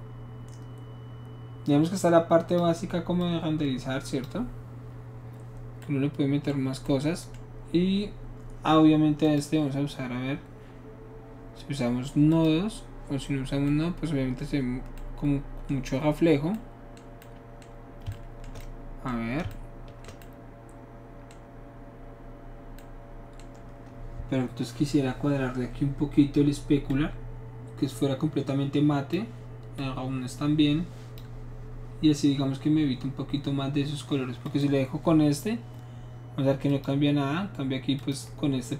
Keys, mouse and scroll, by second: 3.2-4.3 drag, 9.3 click, 12.3 click, 13.7-18.5 middle drag, 26.9-29.2 drag, 29.8-31.2 drag, 34.5 click, 36.7 click, 38.0 click.